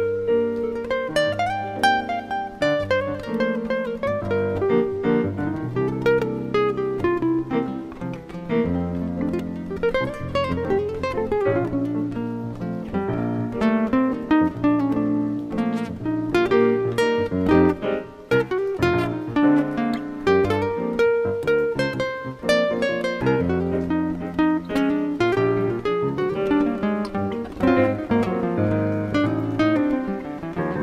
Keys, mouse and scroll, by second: 7.4 click, 9.6 Tab, 12.1 click, 14.0 click, 15.0 middle click, 16.6 shift+middle click, 19.7 click, 23.1 click, 26.1 click, 27.7 click, 28.6 click, 28.9 click, 29.2 click, 30.6 shift+n.